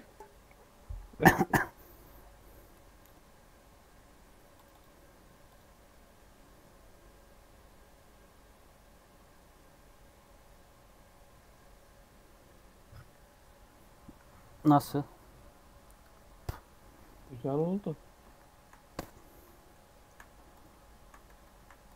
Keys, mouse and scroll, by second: 5.4 click, 5.7 scroll down 1, 5.8 middle click, 6.1 scroll up 1, 6.3-8.7 middle drag, 8.7-9.1 scroll up 2, 9.1-14.3 middle drag, 18.2 shift+middle click, 18.8 scroll up 1, 19.5 shift+middle click, 20.4 click, 21.2 Tab, 21.5 1, 21.8 click.